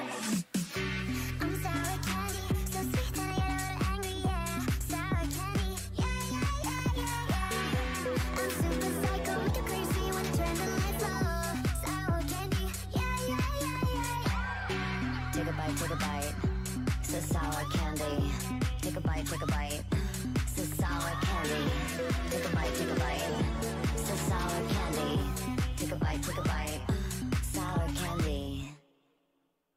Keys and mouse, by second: 0.0-0.7 typing, 1.2 Tab, 1.9 middle click, 3.7 Tab, 4.5 c, 5.4-7.3 right drag, 5.6 w, 6.3 c, 6.7-8.8 drag, 7.7-9.7 right drag, 8.0 w, 9.1-11.5 typing, 12.7 w, 12.9 w, 13.2 Tab, 22.6 Tab, 23.2-25.2 typing, 23.6-25.2 right drag, 24.2 click, 25.4 click, 25.7 click, 26.0 Tab, 26.8 Tab, 27.2 a, 27.5 c, 28.1-29.7 drag, 28.4 w, 28.9 Tab, 29.2 middle click, 29.2 right click.